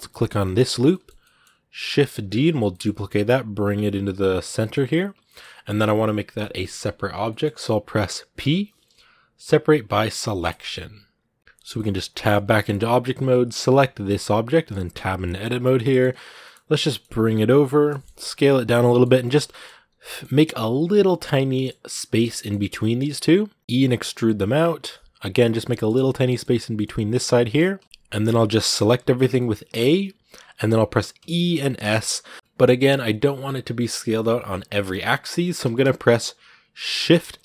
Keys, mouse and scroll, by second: 0.3 alt+right click, 0.7-2.0 middle drag, 2.0 shift+d, 4.4-10.4 shift+middle drag, 10.4 p, 11.4 middle click, 11.8 scroll down 1, 11.9 middle click, 12.2 scroll up 2, 12.4-13.5 middle drag, 13.5 g, 14.3 middle click, 14.7 Tab, 15.0 middle click, 15.4 a, 15.6-16.6 middle drag, 16.6 g, 17.7 middle click, 18.1 s, 18.6 scroll down 1, 18.6 middle click, 19.1 shift+scroll up 2, 19.3 middle click, 19.6 g, 21.3-23.6 middle drag, 23.6 e, 25.5 shift+middle click, 26.5 g, 28.1 middle click, 28.5 a, 29.0 scroll down 2, 29.2-31.0 middle drag, 31.0 e.